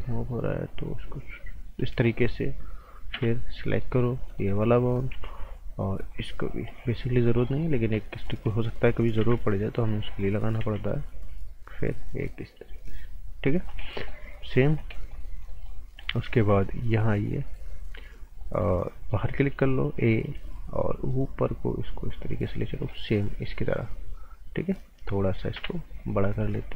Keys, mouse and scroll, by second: 0.7 click, 2.0 right click, 3.1 b, 3.7 click, 5.1 a, 6.1 click, 7.5 right click, 7.8 scroll down 1, 8.0 right click, 8.3 scroll up 1, 8.5 right click, 9.2 b, 9.8 click, 10.1 scroll up 1, 10.3 right click, 10.6 a, 10.8 scroll up 1, 11.7 click, 13.6 scroll down 1, 13.8 right click, 14.7 scroll down 1, 14.9 right click, 15.7 scroll up 1, 16.2 b, 16.8 scroll up 1, 18.4 right click, 19.0 click, 19.3 right click, 19.9 a, 20.8 click, 22.4 scroll down 1, 22.9 right click, 23.8-25.5 scroll up 1, 25.5 t, 26.5 click.